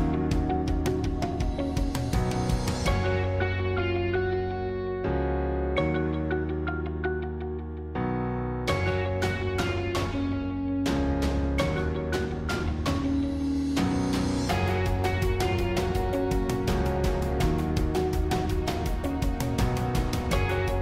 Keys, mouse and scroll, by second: 0.3-2.1 middle drag, 2.1 alt+shift+click, 5.4 shift+click, 5.8 middle click, 6.6-7.2 scroll up 1, 7.2-8.2 middle drag, 8.2 shift+click, 10.3 shift+click, 10.8 middle click, 11.7-12.2 scroll down 2, 12.2-13.8 shift+middle drag, 13.8 shift+click, 14.3-15.7 middle drag, 15.7 shift+click, 17.1 shift+click, 17.6-18.7 middle drag, 18.7 scroll up 2, 19.2-20.8 middle drag.